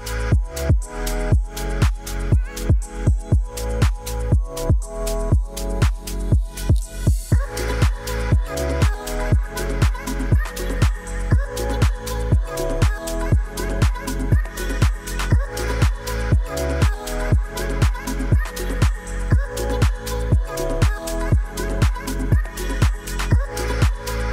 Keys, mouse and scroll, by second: 0.1 r, 0.2 x, 0.8 9, 1.2 0, 1.5 Return, 2.4 s, 2.8 click, 3.0 g, 3.4 z, 3.6 click, 4.0 Tab, 4.6 a, 5.0 f, 5.3 Tab, 5.9 s, 6.3 click, 7.3 g, 8.1 s, 9.1 shift+d, 9.8 click, 10.1 shift+d, 10.6 click, 11.0 s, 11.2 click, 11.4 shift+d, 12.4 s, 12.6 click, 13.7 shift+click, 14.8 click, 16.3 shift+click, 17.2 g, 17.4 y, 18.3 click, 19.1 drag, 19.3 click, 19.6 g, 19.8 z, 20.6 drag, 20.9 g, 22.2 click, 22.7 click, 23.9 shift+click.